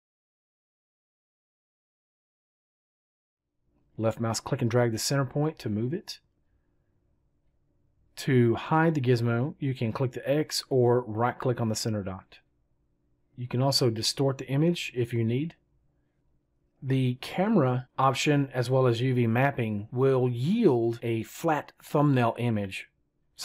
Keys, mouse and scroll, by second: 10.8-12.4 right drag.